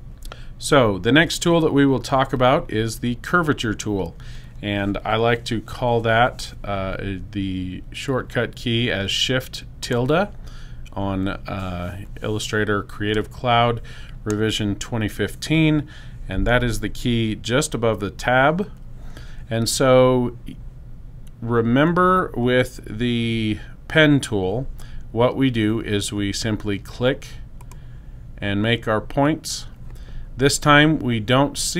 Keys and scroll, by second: 10.2 shift+`.